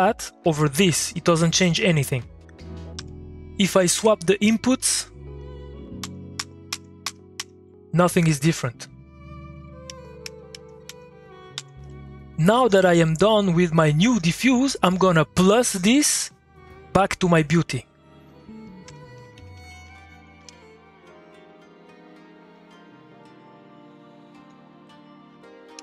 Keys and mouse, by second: 0.5 2, 2.1 click, 2.9 2, 4.9 click, 7.6 shift+x, 8.8 middle click, 9.1 click, 9.3 middle click, 9.8 shift+x, 16.5 middle click, 16.7 click, 17.5 click, 18.8 Tab, 18.9-20.2 typing, 20.3 Return, 21.7 click, 22.7 middle click, 23.9 click, 24.1 click.